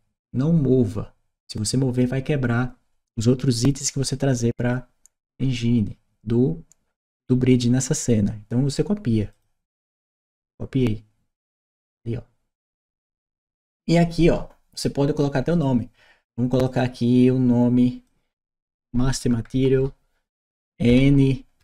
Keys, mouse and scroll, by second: 9.1 click, 12.6 click, 15.3 click, 16.5 click, 17.9 click, 19.4 Right, 20.7-21.6 typing.